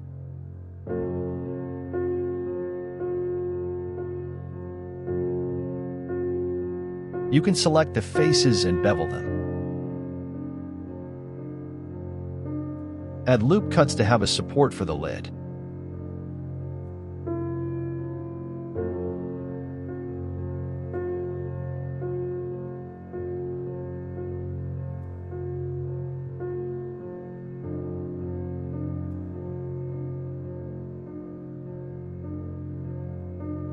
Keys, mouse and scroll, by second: 1.0 shift+middle click, 1.7 Tab, 2.0-2.9 middle drag, 2.9-3.3 scroll up 3, 3.3 shift+middle click, 3.7 Tab, 5.8 middle click, 6.3 click, 6.6 middle click, 7.3 shift+click, 7.6 middle click, 8.3 ctrl+b, 11.1 middle click, 11.8-12.1 scroll up 1, 12.1-13.4 shift+middle drag, 13.4 ctrl+r, 22.3 ctrl+r, 27.0-28.2 middle drag, 28.2-28.5 scroll up 1, 28.5-29.9 shift+middle drag, 29.9-30.9 drag, 31.2 shift+click.